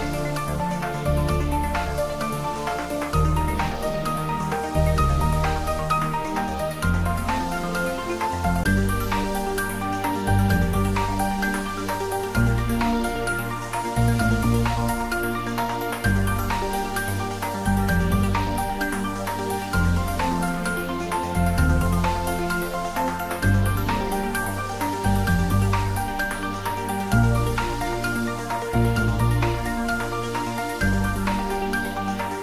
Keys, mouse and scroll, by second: 1.5 click, 5.3 click, 8.0 click, 9.6 click, 13.0 click, 16.0 click, 18.3 click, 23.9 click, 28.5 click, 31.7-32.4 scroll down 1.